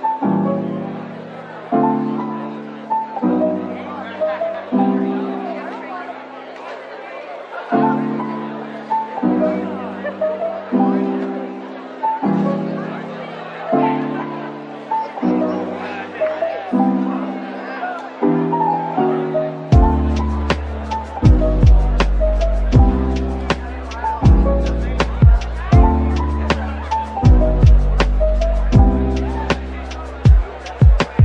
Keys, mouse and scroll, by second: 3.2 Tab, 3.9 typing, 5.8 typing, 7.8-8.5 typing, 8.1 alt+click, 10.2-13.3 scroll down 1, 19.8-21.2 typing, 21.9 double click.